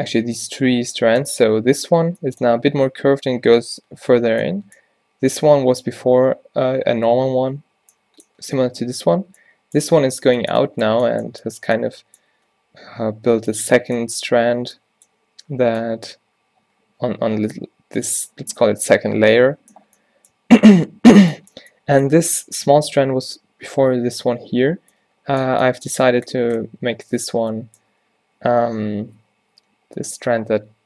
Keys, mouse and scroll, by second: 26.7 z, 30.1 z.